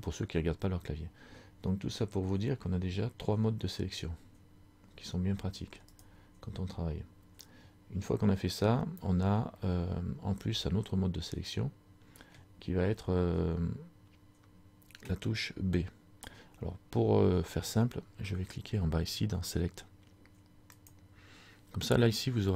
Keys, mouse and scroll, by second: 6.0 right click, 9.6 scroll up 1, 9.7 middle click, 20.8 click.